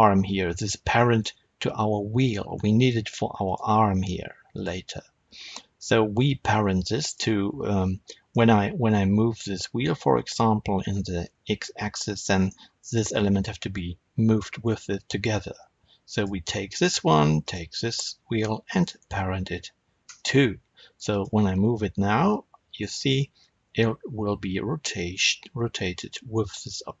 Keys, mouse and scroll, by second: 0.5-0.9 scroll down 1, 0.9-3.4 shift+middle drag, 2.5-3.4 scroll up 1, 3.4 click, 4.5 click, 7.0 click, 8.0-12.4 middle drag, 10.2 r, 12.4 right click, 16.0 click, 17.3 shift+click, 18.9 ctrl+p, 20.0 Return, 21.0 click, 22.1 r, 26.4 right click.